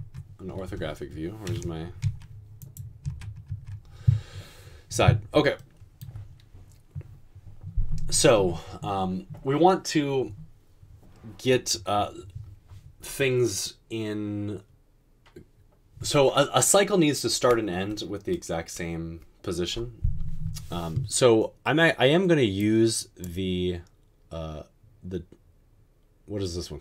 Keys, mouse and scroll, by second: 2.0-3.5 typing.